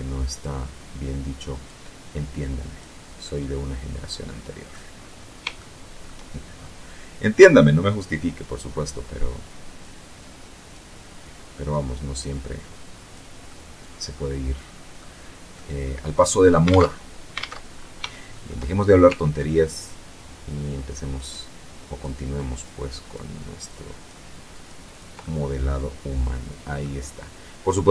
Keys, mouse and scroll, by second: 0.9-2.3 drag, 2.5-4.2 middle drag, 4.8 shift+click, 7.8-9.3 drag, 9.4 click, 11.6-12.6 drag, 12.7-14.4 middle drag, 14.8 click, 16.0 alt+Tab, 16.6 alt+Tab, 17.0 alt+scroll up 1, 17.4 shift+click, 18.6-20.5 ctrl+drag, 20.6 ctrl+click, 21.6 ctrl+click, 22.1 ctrl+click, 23.0 ctrl+click, 23.8 ctrl+click, 24.2 ctrl+click, 24.5-26.3 ctrl+middle drag, 27.2-27.9 ctrl+drag.